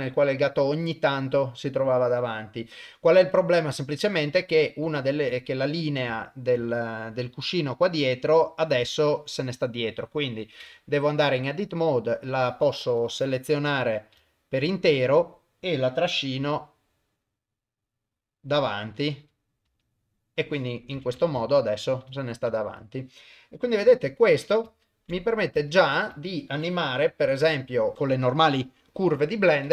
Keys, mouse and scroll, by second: 5.0 ctrl+middle click, 5.4 middle click, 6.2 ctrl+middle click, 6.7 shift+middle click, 7.7 click, 8.0 middle click, 8.9 ctrl+middle click, 10.6 Tab, 11.4 click, 13.0 click, 14.2 shift+middle click, 14.7 middle click, 16.4 g, 18.8 middle click, 19.7 KP_0, 21.0 Tab, 21.5 shift+middle click, 22.2 shift+middle click, 22.8 click, 23.8 g, 24.9 ctrl+middle click, 25.2 shift+middle click, 25.8 ctrl+s, 26.2 shift+middle click, 27.1 g.